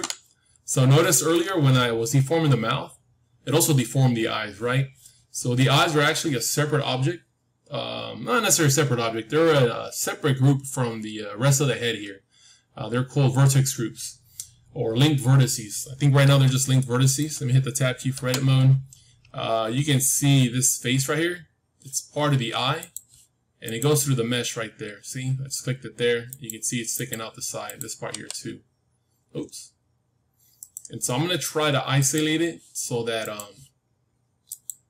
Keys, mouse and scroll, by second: 0.4 middle click, 1.0-3.1 middle drag, 16.7-18.7 middle drag, 18.0 Tab, 18.7-21.3 scroll up 1, 21.3 scroll up 1, 22.8-25.9 drag, 26.2-29.6 drag, 28.0 g, 30.9-33.0 middle drag, 31.9-34.8 drag.